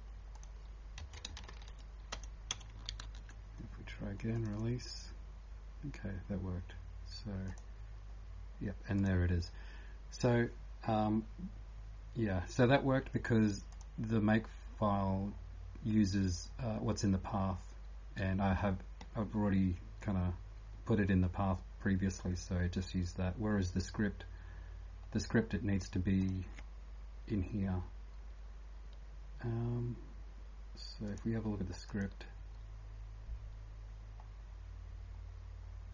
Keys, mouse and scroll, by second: 0.3 click, 1.4 shift+Home, 1.5 shift+Home, 2.1 BackSpace, 2.5 BackSpace, 2.9 ctrl+s, 4.5 click, 7.5 click, 13.7 click, 14.7 scroll down 2, 15.7 scroll down 2, 26.2 click, 34.2-34.6 scroll up 2.